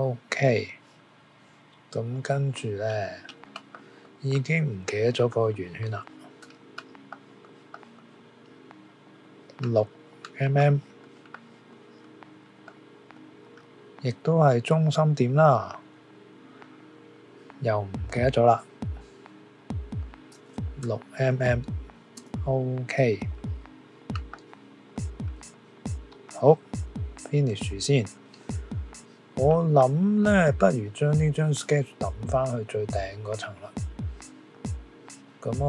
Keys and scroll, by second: 20.8 6, 22.1 Return.